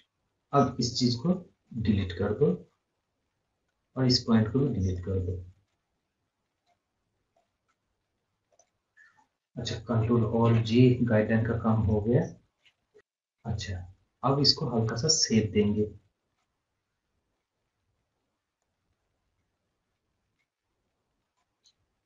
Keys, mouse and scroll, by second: 0.9 click, 2.0 scroll up 1, 3.3 scroll down 1, 5.0 click, 5.7 scroll up 1, 6.5 right click, 8.5 click, 10.4 ctrl+alt+g, 11.2 scroll up 1, 11.5 scroll, 12.4 scroll, 12.5 scroll up 1, 13.0 scroll down 1, 13.2 scroll up 1, 13.6 scroll, 14.8-15.5 scroll down 1, 17.4 shift+Num_Lock, 17.4 scroll down 1, 18.5 shift+click, 21.6 shift+click.